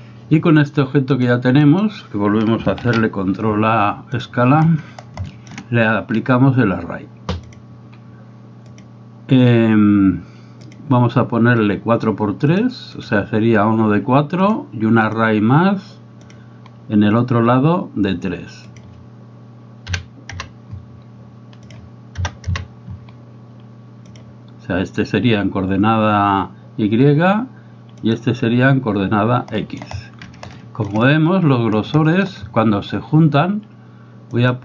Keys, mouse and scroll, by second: 1.3 click, 2.9 ctrl+a, 5.3 shift+middle click, 8.9-10.8 drag, 12.5 click, 15.1-16.4 drag, 18.7-20.8 drag, 21.6-23.2 drag, 24.2 click, 28.1 click, 29.6 middle click, 30.6 shift+middle drag, 32.2 shift+middle drag.